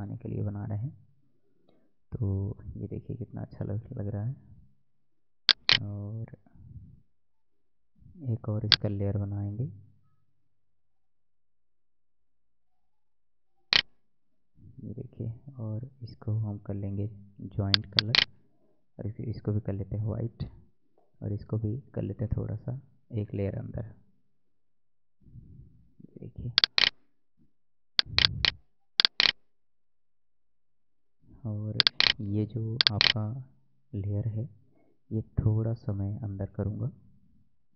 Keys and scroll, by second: 15.4 ctrl+e, 21.7 ctrl+[, 24.2 ctrl+[, 35.0 Right.